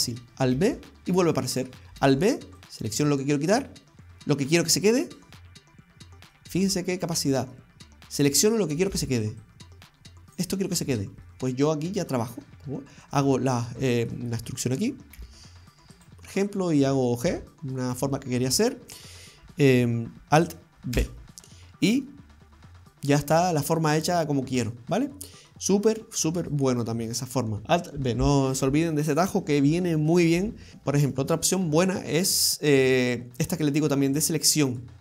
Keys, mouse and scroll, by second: 0.6 alt+b, 2.1 alt+b, 3.9 middle click, 6.7 alt+b, 7.2 middle click, 9.0 alt+b, 11.0 scroll up 2, 11.3 middle click, 12.0-13.0 scroll up 2, 13.1 right click, 13.9 middle click, 15.2 e, 17.2 g, 18.2-19.6 scroll down 4, 20.2 alt+d, 21.0 alt+b, 21.9 scroll down 1, 22.1 middle click, 23.4-24.0 scroll up 3, 23.8 middle click, 25.7-26.5 scroll down 2, 26.7 shift+middle click, 30.7 right click, 30.7-31.2 scroll down 2, 30.7 shift+h, 31.6-32.4 scroll down 1, 33.5 right click, 34.1 shift+right click, 34.5 shift+right click, 34.5 shift+right click, 34.8 shift+right click.